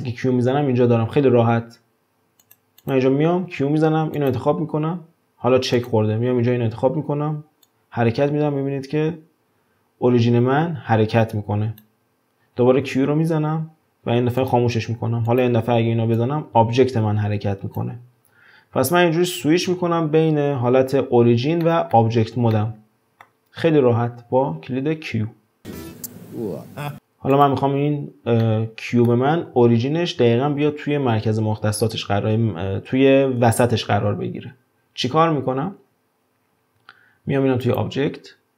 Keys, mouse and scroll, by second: 0.0 q, 2.5 click, 2.8 click, 3.2 q, 5.8 click, 6.8 scroll up 2, 7.7-10.7 drag, 12.9 q, 15.3 click, 16.2-18.3 drag, 18.3 scroll up 2, 18.9-19.7 scroll down 1, 19.7 ctrl+z, 21.6-24.2 shift+middle drag, 24.2 q, 26.9 scroll down 2, 27.3 click, 28.4-31.4 middle drag, 33.7-36.7 scroll up 1, 37.6-38.5 drag.